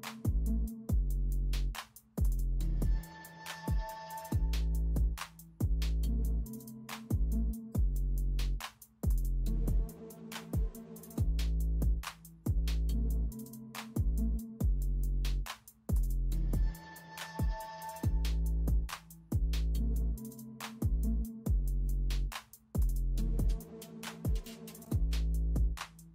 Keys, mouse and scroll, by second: 1.1-1.5 alt+scroll down 1, 1.6-1.9 alt+scroll up 1, 2.6 space, 3.2 space, 4.3 space, 6.9 ctrl+z, 7.7 alt+scroll up 1, 8.7 space, 10.2 alt+scroll up 1, 11.3 space, 12.2 space, 12.7 space, 13.2 alt+scroll down 1, 13.4 alt+scroll up 1, 16.6 space, 16.8-17.2 alt+scroll up 1, 18.2 alt+click, 19.1-19.5 alt+scroll down 1, 20.8-21.2 alt+scroll down 1, 21.2-21.6 alt+scroll up 1, 22.3 space, 22.9 space, 23.9 alt+click.